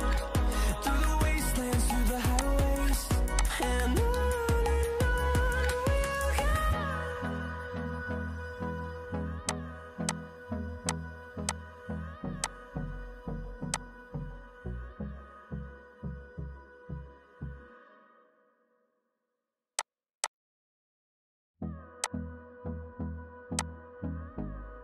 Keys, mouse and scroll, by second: 2.3 shift+click, 20.1 double click.